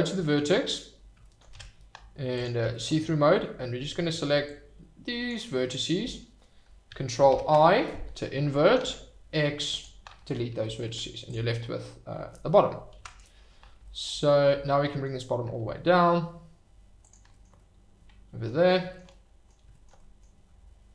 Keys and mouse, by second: 1.2 shift+right click, 1.5 Tab, 4.4 click, 7.3 ctrl+i, 8.8 x, 10.9 Tab, 11.6-12.3 middle drag, 14.8 g, 14.8 middle click, 17.0 click, 17.7-18.5 drag, 19.0-19.5 drag, 20.1 middle click.